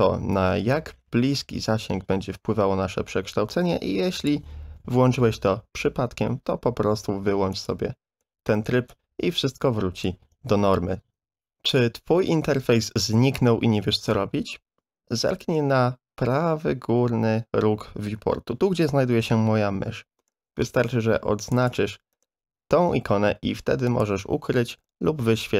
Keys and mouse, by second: 7.5 click, 8.9-10.0 drag, 11.2 ctrl+z, 21.5 click, 23.9 click.